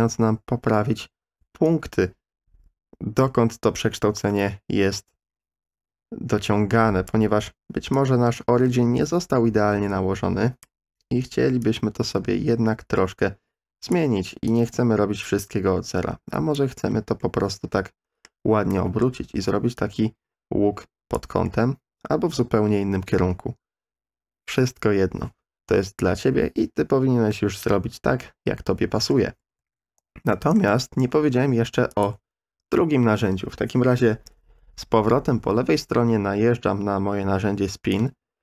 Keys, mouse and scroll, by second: 4.0-7.2 drag, 8.0-10.6 drag, 11.6-13.9 drag, 14.6-16.6 drag, 17.2-18.2 middle drag, 18.8 middle click, 19.9-21.2 drag, 21.5-23.1 middle drag, 29.2 ctrl+z, 29.5 ctrl+z, 30.3 middle click, 31.1 3, 37.9-38.4 drag.